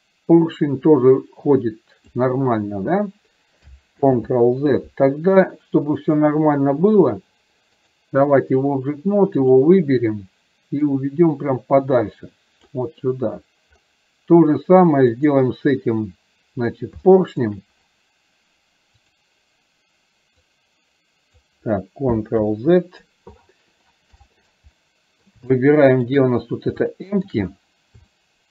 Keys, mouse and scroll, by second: 6.0 click, 8.0 click, 11.0-12.8 drag, 15.2 click, 17.2 shift+middle drag, 19.0 click, 20.5-21.5 drag, 22.5 ctrl+z, 24.9-25.3 middle drag, 26.9-27.3 shift+middle drag, 28.2 shift+middle click.